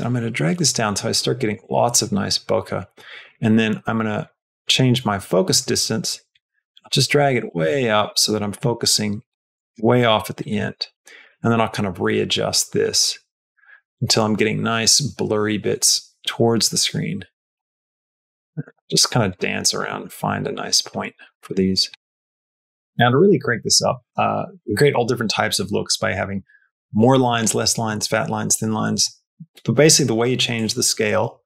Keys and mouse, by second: 3.3-9.6 drag, 11.2-14.0 shift+drag, 16.6-22.0 shift+drag, 30.4-31.4 shift+drag.